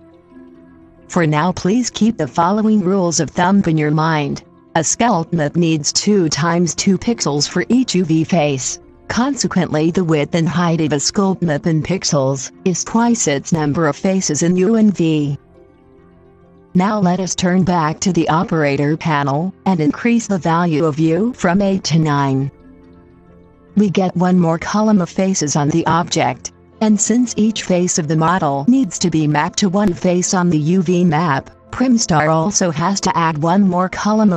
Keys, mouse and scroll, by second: 21.5-23.3 middle drag, 24.7-27.6 drag.